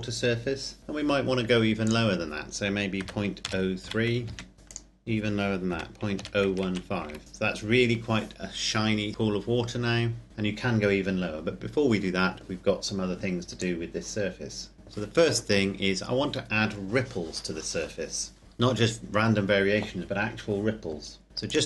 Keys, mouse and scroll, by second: 1.8 click, 2.9 KP_Decimal, 3.3 KP_0, 3.7 KP_3, 4.5 KP_Enter, 4.6 click, 5.7 KP_Decimal, 6.1 KP_0, 6.4 KP_1, 6.5 KP_5, 7.2 KP_Enter, 13.6 click, 21.5 click.